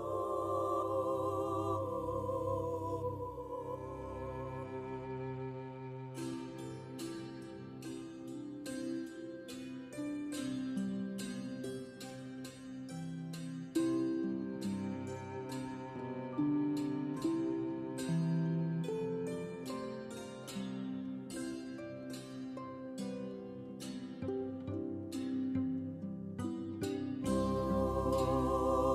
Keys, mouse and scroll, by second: 0.3 KP_3, 0.7 ctrl+middle click, 1.0 shift+middle click, 2.1 click, 6.8 shift+middle click, 7.2 s, 10.0 ctrl+a, 10.6 g, 11.7 Tab, 12.2 ctrl+r, 16.1 Tab, 16.5 g, 19.4 Tab, 20.5 alt+right click, 20.8 r, 24.0 Tab, 24.5 x, 25.0 right click, 25.2 Tab, 25.5 Tab.